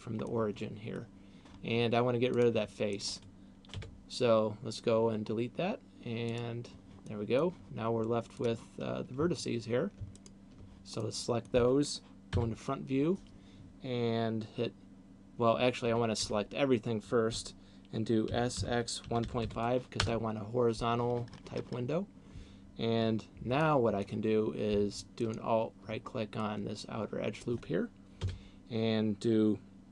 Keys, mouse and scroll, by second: 0.2 middle click, 2.2 click, 2.9 right click, 3.9 Delete, 6.9 middle click, 8.2 click, 10.2 alt+right click, 10.9 middle click, 12.2 KP_1, 15.9 a, 16.4 a, 18.4 s, 23.7 middle click, 25.4 alt+right click, 26.4 middle click, 28.4 KP_1.